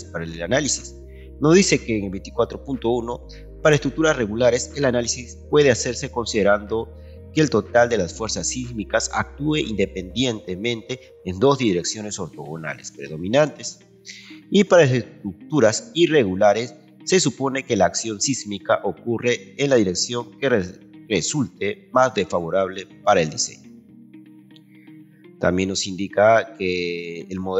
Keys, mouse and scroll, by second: 26.4 scroll down 2.